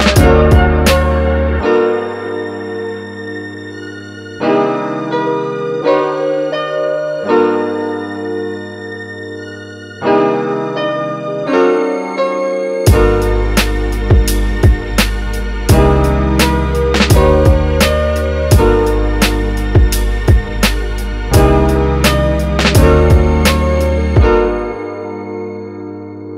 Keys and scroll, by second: 26.0 super+z.